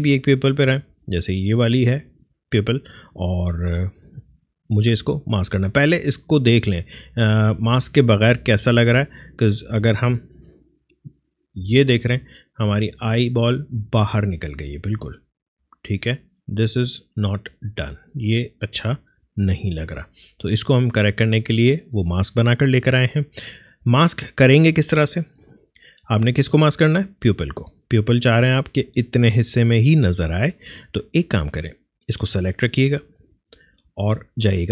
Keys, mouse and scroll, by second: 0.2 click, 7.3 click, 16.0 Left, 18.9 Right, 20.8 click, 25.4 click, 33.6 click.